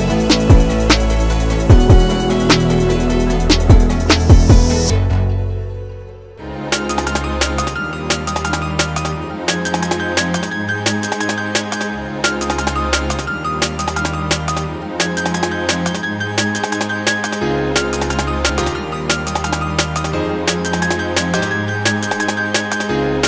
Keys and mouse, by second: 0.5-1.2 middle drag, 1.3 shift+middle click, 1.5 click, 3.3 click, 3.9 shift+click, 5.1 ctrl+j, 8.6 click, 9.9 click, 10.7 shift+click, 12.0 ctrl+j, 15.0 g, 18.6 shift+click, 19.8 ctrl+j, 20.5 shift+drag, 22.2 g.